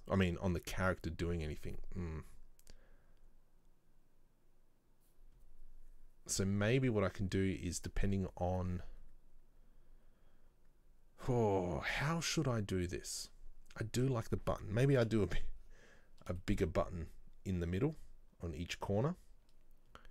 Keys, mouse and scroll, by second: 15.1 KP_7, 16.0 scroll up 1, 16.5-19.5 shift+middle drag.